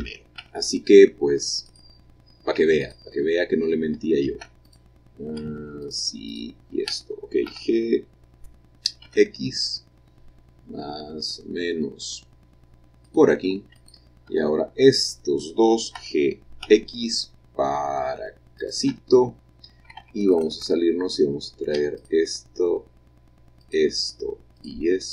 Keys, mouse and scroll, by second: 0.0 g, 0.4 x, 1.7 click, 2.4 click, 2.8 click, 4.7 shift+click, 5.9 shift+click, 6.3 shift+click, 7.5 g, 9.1 x, 13.1 click, 13.8 click, 14.3 Tab, 16.0 g, 16.7 x, 18.6-19.7 shift+drag, 20.0 Tab, 20.4 click, 22.0 shift+click, 23.7 shift+click, 24.3-25.1 shift+middle drag.